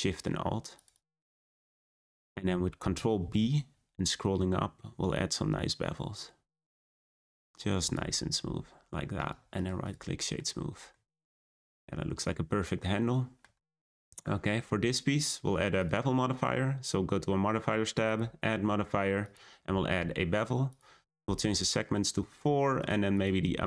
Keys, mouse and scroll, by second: 0.7 shift+click, 0.9 shift+click, 1.5 shift+click, 1.6 shift+click, 2.1-2.9 scroll up 1, 3.2 b, 8.1 scroll down 1, 8.4 Tab, 9.1-9.8 right drag, 9.8 click, 10.1 scroll up 1, 10.1 middle drag, 10.4-10.9 scroll down 2, 10.9-13.9 middle drag, 13.9 click, 14.3-15.7 shift+middle drag, 15.7 click, 19.3-22.8 drag, 23.1-23.6 drag.